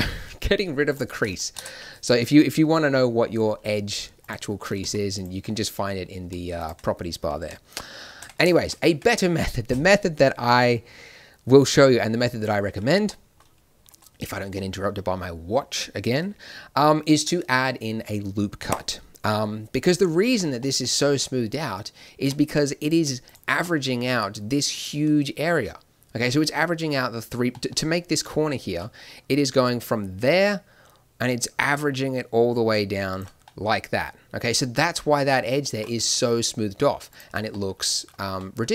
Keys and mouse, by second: 7.3 n, 8.1 Tab, 8.8 Tab, 14.6 middle click, 20.2 Tab, 22.2 Tab, 23.6 click, 29.9 d, 30.2-32.4 drag, 33.1 d, 33.4-34.8 drag, 35.9 n, 37.0 click, 37.2 n, 37.7-38.7 middle drag.